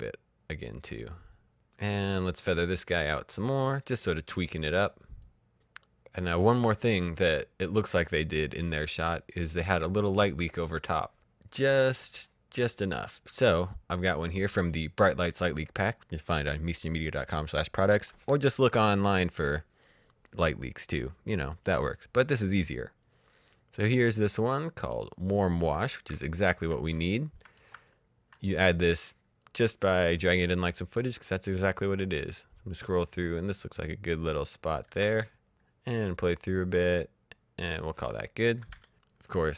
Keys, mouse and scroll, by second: 0.0-1.0 scroll down 1, 1.6 click, 2.9 click, 8.6 click, 11.9 click, 13.9 click, 22.4 click, 25.7-26.5 alt+scroll down 4, 26.7 click, 26.9-27.5 shift+scroll up 3, 27.5 click, 27.8-28.1 alt+scroll down 1, 28.3 click, 28.5-29.3 shift+scroll up 3, 29.3 click, 34.2 c, 34.8 click, 35.2 space, 37.3 space, 37.6 click, 37.8 v, 38.1 click, 38.4 Delete, 38.6 click, 38.7 Delete, 39.0 click, 39.2 Delete.